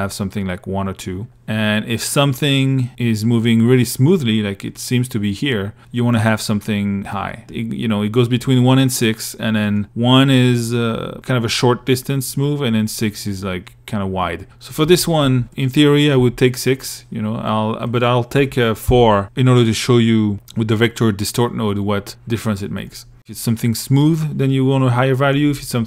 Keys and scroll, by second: 14.0 2, 15.4 1, 18.0 4.